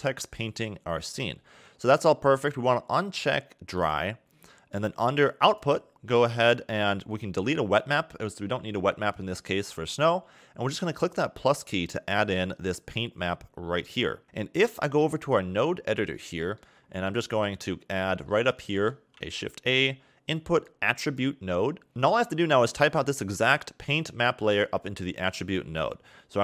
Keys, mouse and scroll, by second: 1.6 scroll down 2, 3.6 click, 4.0 scroll down 3, 5.2 click, 5.5-6.8 scroll down 7, 7.6 click, 11.1 click, 14.2 middle click, 15.4-15.9 scroll up 3, 15.9 middle click, 16.4 scroll up 1, 16.7 scroll down 4, 16.9 middle click, 17.4-18.3 scroll up 7, 18.3-18.7 scroll up 2, 18.7 shift+a, 25.1 click.